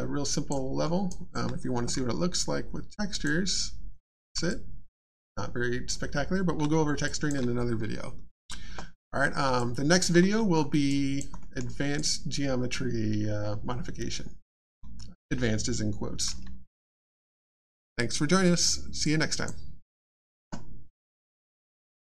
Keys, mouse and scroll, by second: 0.8 alt+scroll up 1, 1.1 alt+click, 4.5 alt+click, 6.3 alt+scroll down 2, 7.0 alt+click, 9.6 alt+click, 10.5-10.9 alt+scroll up 1, 10.9 alt+click, 11.4 alt+middle click, 11.6-11.9 alt+scroll down 1, 11.9 alt+click, 19.0 click.